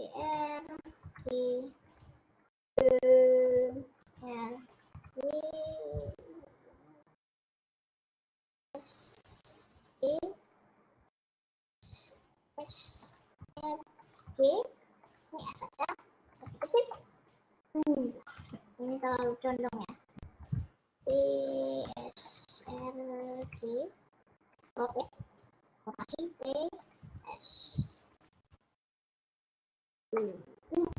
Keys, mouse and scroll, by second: 0.3 r, 1.0 g, 2.6 e, 4.1 r, 5.0 g, 8.7 s, 10.0 e, 11.5 s, 13.5 r, 14.4 g, 15.5 s, 16.7-18.6 middle drag, 18.6 r, 19.6 g, 21.4 e, 21.9 s, 22.7 r, 23.4 g, 26.2 e, 27.1 s, 28.7 g, 30.2-30.9 middle drag.